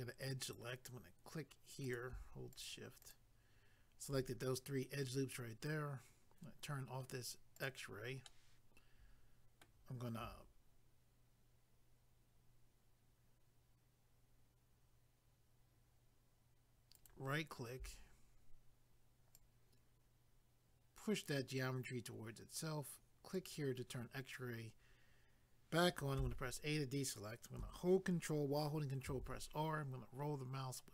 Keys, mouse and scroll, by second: 0.5 click, 1.8 click, 2.5 shift+click, 7.6 click, 8.3 middle click, 16.9 ctrl+right click, 19.3 click, 23.3 click, 26.2 a, 29.1 ctrl+r, 29.8 scroll up 1.